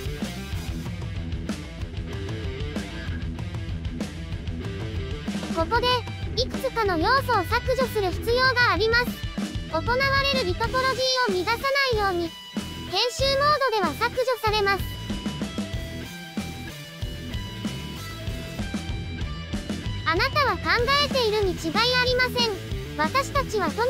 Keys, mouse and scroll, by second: 0.0 right click, 1.1 ctrl+z, 1.3 right click, 1.6 ctrl+z, 2.3 shift+click, 3.2 scroll down 1, 3.4 shift+click, 3.9 shift+click, 4.1 shift+click, 4.2-5.0 scroll down 4, 5.0-7.7 right drag, 14.1-14.5 middle drag, 14.5 click, 14.7 shift+middle click, 14.8 scroll up 3, 15.0 Tab, 15.1 a, 15.2 middle click, 15.4 l, 15.5 l, 16.2 middle click, 16.4 middle click, 16.7 x, 16.9 middle click, 17.2 click, 17.6 scroll up 2, 17.7 right click, 17.9 click, 17.9 right click, 18.1-22.8 typing, 18.1 scroll up 1, 18.2 middle click, 18.6 middle click, 19.2 shift+middle click, 19.6 middle click, 20.3 shift+middle click, 21.0 shift+middle click, 22.0 scroll down 6, 22.1 middle click, 22.4 shift+middle click, 22.6 scroll down 1, 22.6 Tab, 22.7 shift+middle click, 23.6 alt+j.